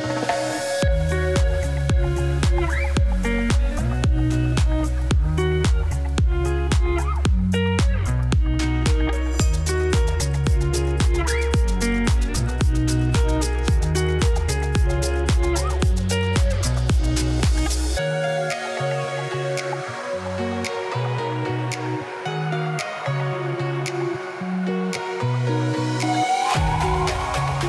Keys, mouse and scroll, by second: 0.8 click, 1.3 drag, 1.5-2.9 drag, 4.1 Tab, 5.2 Tab, 5.4 click, 5.9 Tab, 6.8 click, 7.2 z, 7.5 z, 8.5 Tab, 8.8 click, 9.0 Tab, 9.4 Tab, 10.3 1, 10.5 click, 11.4 Tab, 12.0 Tab, 12.1 click, 12.3 Tab, 12.5 Tab, 12.7 click, 12.9 Tab, 13.4 z, 14.8-16.0 drag, 17.7 z, 18.0 click, 18.2 z, 20.3 Tab, 20.7 r, 23.3 z, 23.9 Tab, 24.4 Tab, 24.5 click, 24.7 Tab, 24.9 Tab, 25.0 click, 25.3 Tab, 25.9 g.